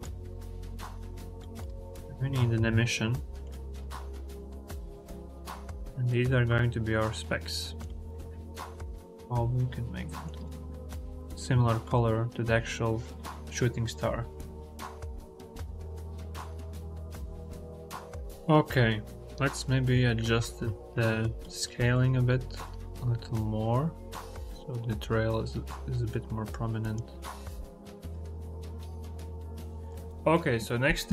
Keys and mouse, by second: 1.4 click, 1.7 shift+a, 4.2 click, 14.5 click, 16.5 click, 17.8 click, 19.8 click, 21.5 click, 22.4-26.9 drag.